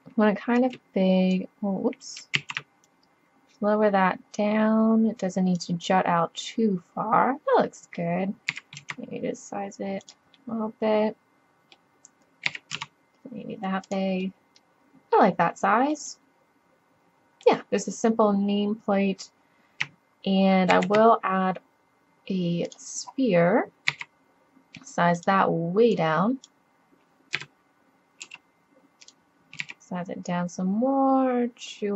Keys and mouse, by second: 2.4 ctrl+z, 4.8-6.2 middle drag, 6.6 middle drag, 6.9 middle click, 8.5 s, 10.5 middle drag, 12.5 s, 12.6-13.6 drag, 14.2-15.9 drag, 16.0 click, 16.4 middle click, 16.9-18.7 middle drag, 20.7 shift+a, 21.9-22.7 middle drag, 23.9 s, 25.1 drag, 26.0-26.7 drag, 27.4 KP_7, 28.3 g, 29.6 s.